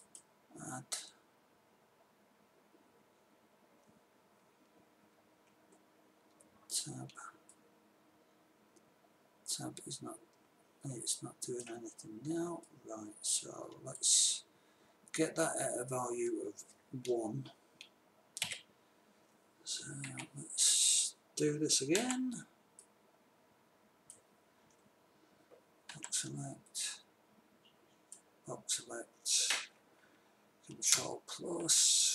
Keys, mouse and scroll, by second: 2.2 click, 5.5 Tab, 9.6 middle click, 12.9-14.9 middle drag, 18.9 KP_3, 20.5 a, 22.4 b, 26.4 b, 31.3 ctrl+KP_Add.